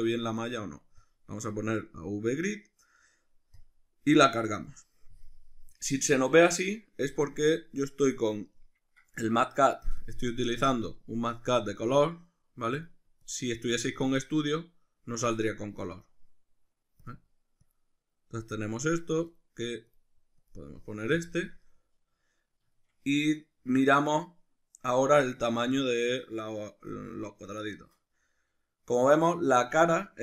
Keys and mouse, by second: 5.8-7.6 middle drag, 7.6-21.6 drag, 21.6-24.9 middle drag, 24.9-28.0 drag, 28.0-30.2 middle drag.